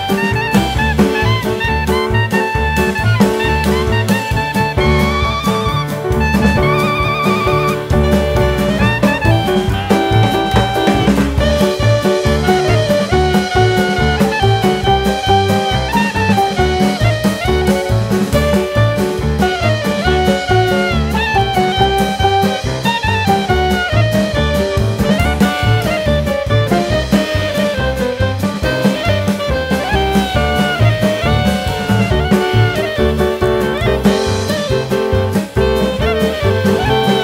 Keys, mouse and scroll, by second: 0.2 middle click, 1.0 alt+z, 1.8 click, 3.0 click, 4.0 a, 4.2 middle click, 5.1 click, 5.9 scroll up 1, 7.3 e, 7.9 s, 13.3 middle click, 16.3 click, 17.4 ctrl+z, 18.6 e, 20.4 middle click, 21.8 Tab, 22.1 click, 22.4 middle click, 23.2 click, 24.0 click, 25.0 click, 25.9 middle click, 27.7 middle click, 30.8 alt+z, 31.6 click, 33.3 middle click, 34.5 middle click, 36.3 click, 36.6 scroll down 1.